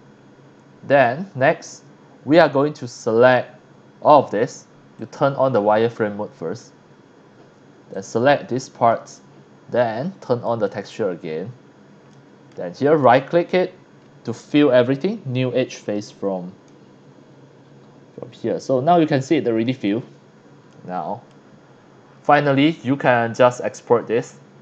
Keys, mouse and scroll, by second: 0.2 scroll up 1, 0.5 scroll down 2, 1.0-3.3 middle drag, 5.0 click, 7.9 click, 10.4 click, 11.2 scroll up 1, 11.7 scroll down 1, 12.1 middle click, 13.0 right click, 15.8 click, 16.7-17.9 middle drag, 20.1 scroll down 1, 20.7 middle click, 21.4-21.9 scroll down 2, 22.1 scroll up 1, 23.1-24.6 middle drag.